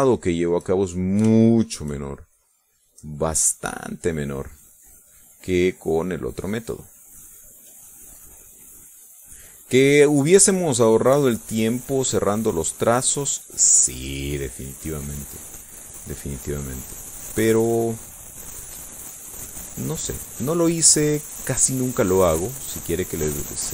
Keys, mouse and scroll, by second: 0.4-2.0 shift+drag, 2.9 shift+click, 3.4-6.3 shift+drag, 6.4-16.2 drag, 17.2 click, 22.6-23.7 drag.